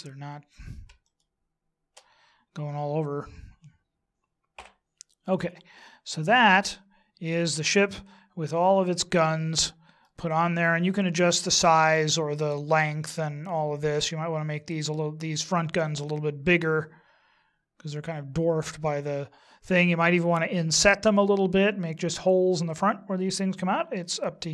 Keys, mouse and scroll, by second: 1.4 shift+right click, 4.6 h, 5.7-6.1 scroll down 3, 6.1 middle click, 10.2-11.2 scroll up 2, 11.3-13.1 scroll up 3, 13.4 middle click, 24.0 middle click.